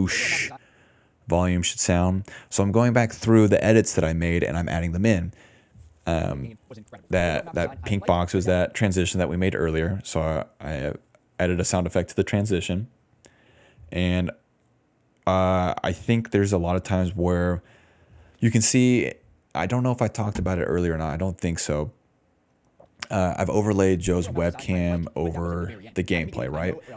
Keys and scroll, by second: 0.5 space, 4.6 d, 4.7 d, 6.1 space, 7.5 s, 8.5 space, 13.7-14.6 typing, 14.8 Tab, 15.9 i, 15.9 space, 19.2-20.6 typing, 23.8 ctrl+s, 23.9 ctrl+space, 24.3 ctrl+s, 24.8 ctrl+d.